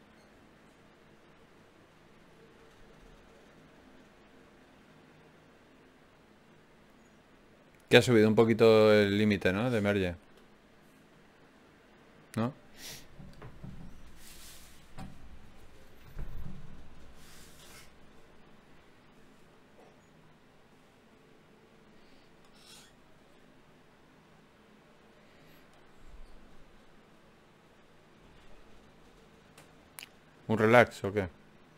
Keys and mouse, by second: 3.7-7.3 drag, 6.7 ctrl+z, 7.9 Tab, 12.5 Tab, 15.7 Tab, 22.1-24.8 right drag, 29.6 d, 30.2 d.